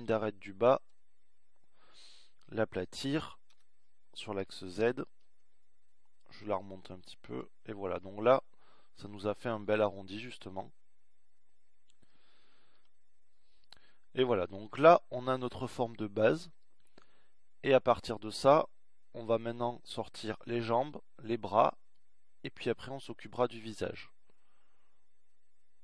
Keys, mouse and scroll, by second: 5.2 s.